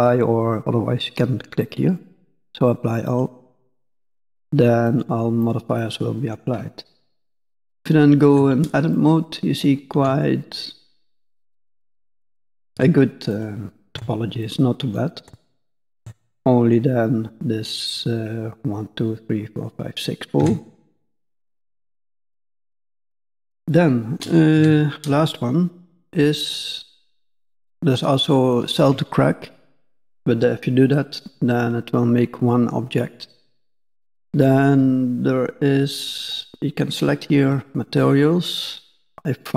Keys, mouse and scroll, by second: 3.0 click, 4.2 click, 4.8 click, 5.4 click, 5.7 middle click, 6.6 scroll up 1, 7.7 Tab, 8.9 middle click, 9.9 Tab, 10.4 middle click, 11.0 click, 11.4 Tab, 11.9 middle click, 12.7 Tab, 13.2 click, 13.9 Tab, 14.4 middle click, 15.2 Tab, 15.9 Tab, 16.3 middle click, 20.3 Tab, 20.7 middle click, 22.1 scroll down 1, 22.2 middle click, 22.9 middle click, 24.5 n, 36.2 click.